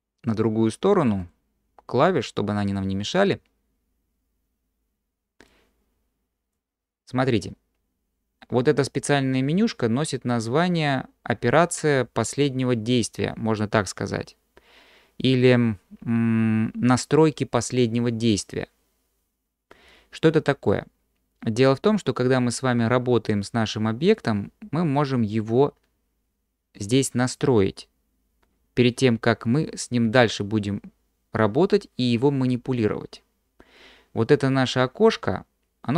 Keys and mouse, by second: 1.2-3.3 drag, 5.5-6.6 drag.